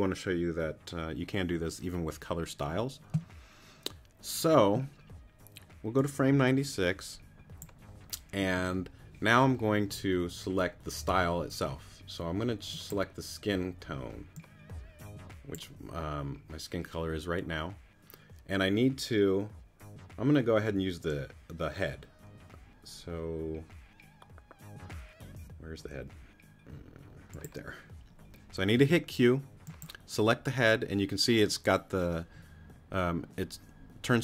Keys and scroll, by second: 28.8 q.